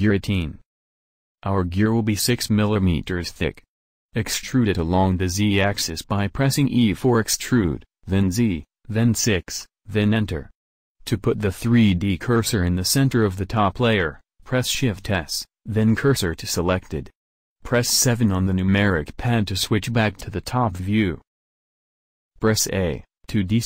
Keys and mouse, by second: 2.7-7.9 middle drag, 4.6 e, 14.6 shift+s, 18.1 KP_7, 19.6-21.3 middle drag, 22.7 a, 23.5 middle click.